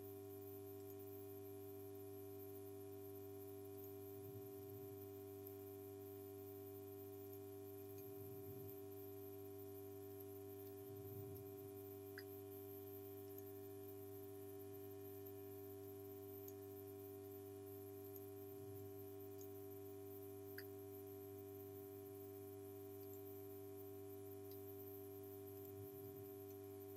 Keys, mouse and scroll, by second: 0.8 click, 3.8 click, 4.5 space, 4.7 click, 5.0 space, 6.0 space, 7.3 click, 7.7 space, 7.9 click, 8.2 space, 10.1 click, 10.5 space, 10.7 click, 11.1 space, 13.0 space, 13.3 click, 15.7 space, 15.9 click, 16.2 space, 18.1 click, 18.6 space, 18.8 click, 19.1 space, 19.9 space, 23.1 click, 25.6 click, 26.1 space, 26.3 click, 26.6 space.